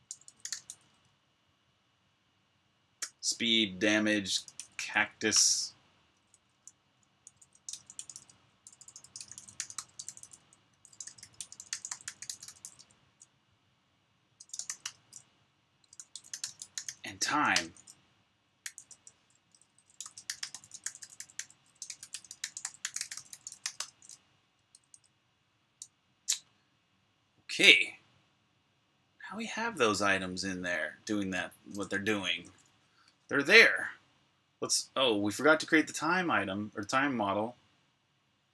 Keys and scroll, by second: 0.0-0.9 typing, 2.5 typing, 3.9-10.1 typing, 14.2-26.0 typing, 26.0 super+h, 32.0-33.7 typing.